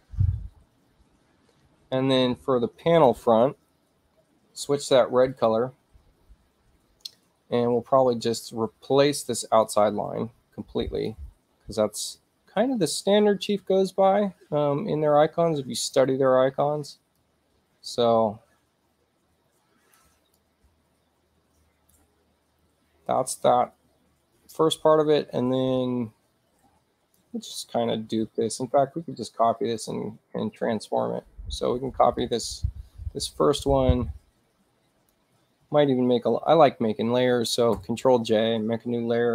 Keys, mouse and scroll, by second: 5.4 click, 9.7-11.1 drag, 13.5-16.0 shift+drag, 17.2-20.0 drag, 20.4-22.0 shift+drag, 24.5-27.2 drag, 28.3 ctrl+z, 29.8 click, 32.2-35.2 drag, 37.8 ctrl+j.